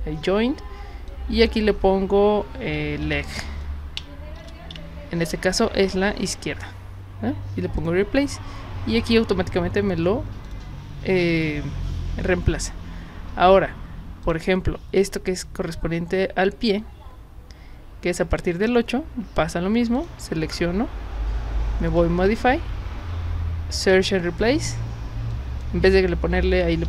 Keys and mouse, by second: 1.1 click, 2.8 l, 3.1 g, 4.4 shift+-, 4.7 l, 7.8 click, 10.5 click, 14.3 click, 20.0 shift+click, 21.9 click, 23.8 click, 25.3 click, 26.4-26.8 typing.